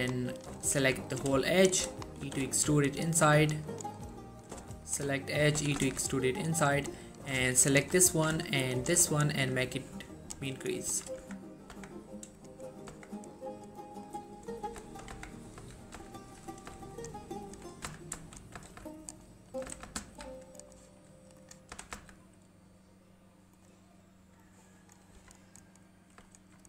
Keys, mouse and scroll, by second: 0.5 click, 2.0 middle click, 2.4 e, 2.6 s, 3.8 click, 4.1 middle click, 4.6 click, 4.8 alt+shift+click, 5.2 alt+shift+middle click, 5.4 scroll up 1, 5.7 e, 5.9 s, 6.9 click, 7.6 alt+shift+click, 8.2 middle click, 8.9 alt+shift+click, 9.8-10.7 click, 11.0 1, 11.3 Tab, 11.6 scroll down 1, 11.9 Tab, 12.5 click, 12.8 scroll down 1, 13.0 Tab, 13.4-13.9 scroll down 1, 13.9-14.2 scroll up 1, 14.2 middle click, 14.5 scroll up 1, 15.0 shift+middle click, 15.5 scroll up 1, 15.7-16.1 typing, 16.7 click, 18.0-18.8 typing, 19.2 right click, 19.4 middle click, 19.8 typing, 20.7 right click, 21.5 click, 21.9 s, 22.0 z, 23.7 click, 25.3 Tab, 25.7-26.3 scroll down 1, 26.5 1.